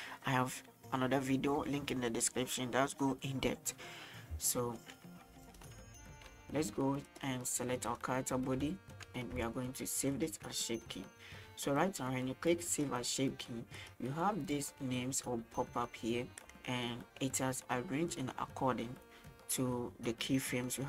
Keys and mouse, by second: 4.5-4.8 shift+middle drag, 5.6-7.1 right drag, 7.1 click, 8.8 shift+middle click, 9.5-10.2 shift+middle drag, 12.9-20.8 drag.